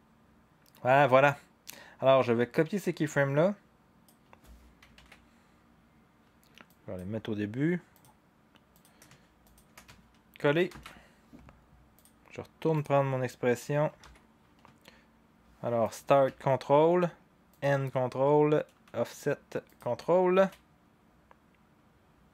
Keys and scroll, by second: 4.9 ctrl+c, 10.7 ctrl+v, 14.0 u.